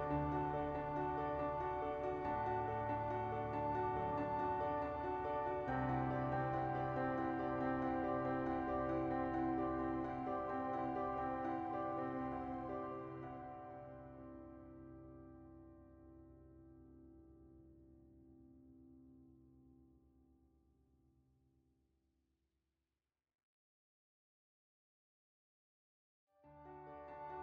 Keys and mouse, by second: 0.2 click, 1.1 Delete, 1.5 click, 3.8 click, 4.4 ctrl+z, 4.4 s, 4.7 click, 5.4 s, 6.0 ctrl+z, 8.1 click, 8.7 click, 9.9 click, 10.3 right click, 10.7 s, 11.4 ctrl+z, 12.2 click, 13.1 s, 14.1 ctrl+z, 14.9 n, 15.9 shift+middle click, 16.4 s, 20.6 shift+middle click, 21.7 right click, 22.3 shift+middle click, 23.0 shift+middle click, 23.6 Tab, 24.8-27.4 drag.